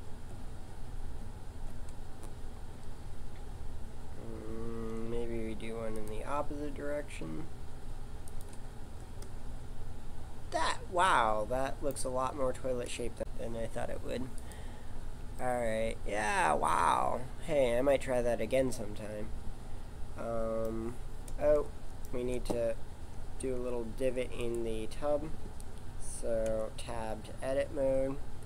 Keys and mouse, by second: 4.7 ctrl+r, 8.8 Tab, 9.3-11.2 middle drag, 12.2 Tab, 12.6 Tab, 13.2 z, 15.4-17.0 middle drag, 23.6 Tab, 24.0 Tab, 26.4 Tab.